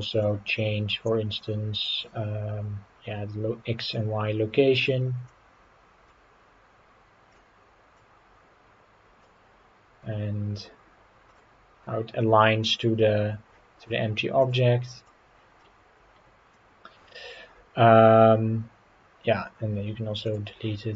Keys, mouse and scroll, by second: 0.8-2.0 scroll down 4, 5.3-7.5 drag, 7.9-9.2 drag, 11.3-13.5 drag, 14.4-15.1 drag, 15.6-17.0 middle drag, 20.3 click.